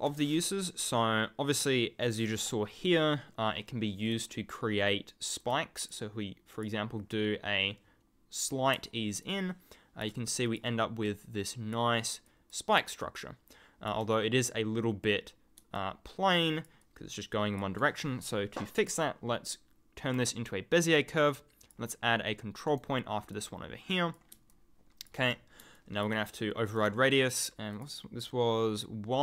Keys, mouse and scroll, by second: 4.1 click, 5.4 click, 9.2 ctrl+click, 9.3-10.3 ctrl+scroll up 1, 10.6 click, 12.5 click, 13.0 ctrl+click, 15.7 ctrl+click, 17.0-17.5 ctrl+scroll up 1, 18.7 click, 20.1 click, 21.6 click, 22.6 right click, 23.3 click, 24.5 ctrl+click, 24.9-25.6 ctrl+scroll up 1, 25.7 ctrl+click, 25.8-26.7 ctrl+scroll down 1.